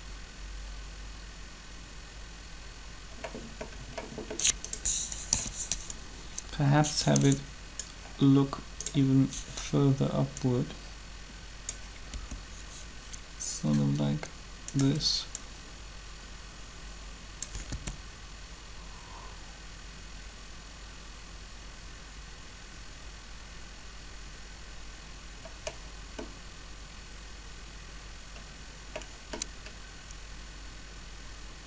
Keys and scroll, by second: 5.2 3, 12.1 r, 17.6 alt+a.